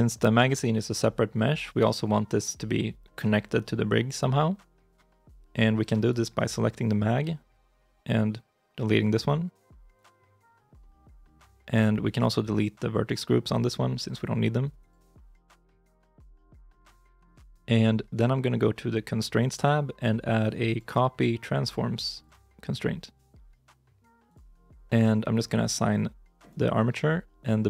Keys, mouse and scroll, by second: 5.9 right click.